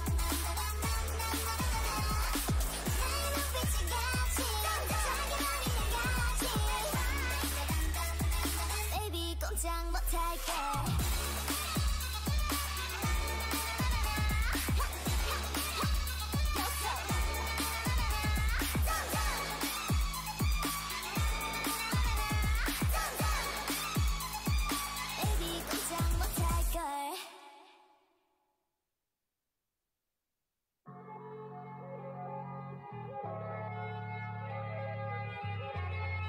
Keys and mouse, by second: 2.0 ctrl+v, 6.0 a, 7.2 a, 8.9 l, 9.2 g, 10.6-13.5 typing, 15.3 t, 16.4-18.4 drag, 17.6 t, 18.4 Tab, 19.9-21.3 drag, 21.2 Tab, 21.5 a, 21.8 a, 23.6 a, 24.5 l, 25.8 t, 28.0-32.4 drag, 31.7 t, 32.4 Tab.